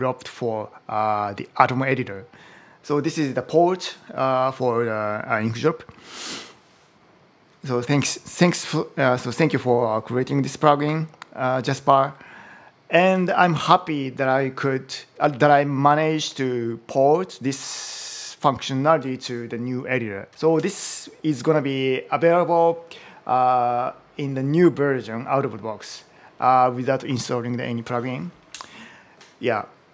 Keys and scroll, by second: 20.3 super+h, 28.4 Down.